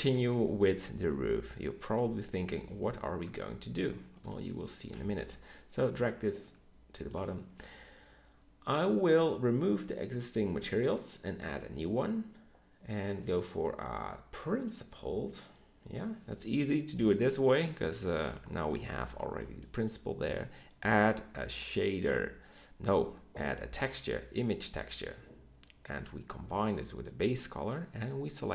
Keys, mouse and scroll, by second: 2.7 Tab, 3.2 Tab, 5.2 Tab, 9.8-11.7 drag, 26.5-27.7 drag.